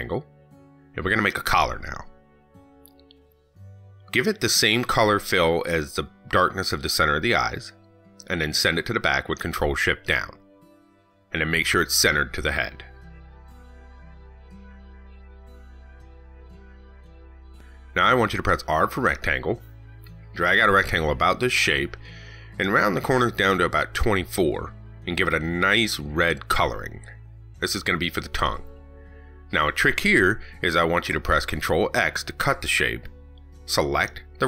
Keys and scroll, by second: 8.6 ctrl+shift+Down, 31.0 ctrl+x, 32.8 ctrl+v.